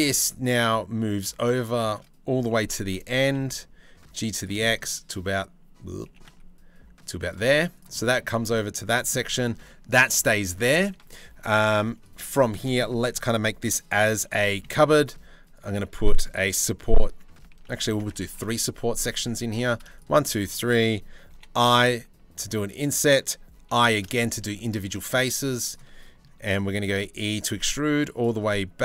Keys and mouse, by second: 2.1 g, 5.7 g, 7.1 z, 8.1 middle click, 9.3 click, 9.6 Tab, 10.5 ctrl+r, 11.7 3, 11.9 click, 14.0 click, 14.5 ctrl+r, 15.6 click, 16.5 3, 17.1 ctrl+z, 17.4 ctrl+z, 17.9 ctrl+r, 19.1 3, 20.9 i, 26.0 middle click, 26.5 e, 28.1 middle click.